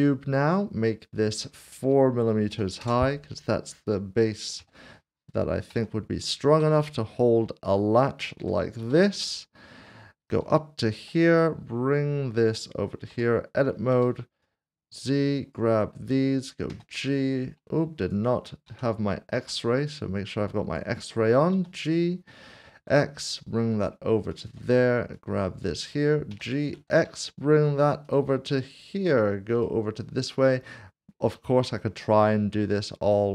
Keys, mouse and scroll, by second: 0.0 a, 2.5 typing, 4.6 typing, 5.7-6.6 typing, 8.8 typing, 10.3 ctrl+click, 11.6 shift+middle click, 13.1 Tab, 14.4 1, 16.7 typing, 18.0 click, 18.6 ctrl+z, 19.4 alt+z, 19.9 click, 22.7 typing, 24.3 ctrl+click, 26.3-26.7 typing, 28.0 ctrl+click, 31.5-32.2 typing.